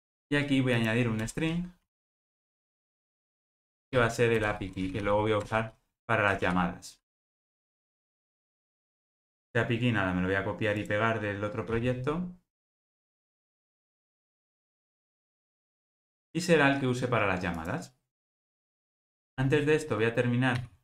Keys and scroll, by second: 2.9 Return, 19.0 super+s.